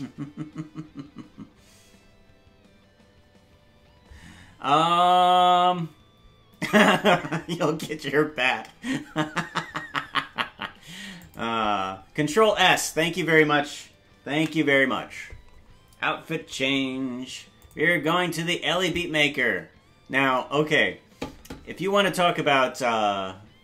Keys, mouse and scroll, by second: 17.7 ctrl+s.